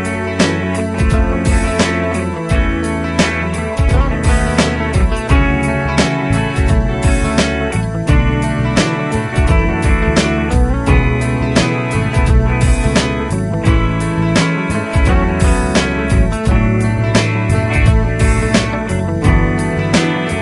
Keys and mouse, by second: 1.4 shift+click, 3.3 shift+click, 10.0 shift+click, 15.4 shift+click.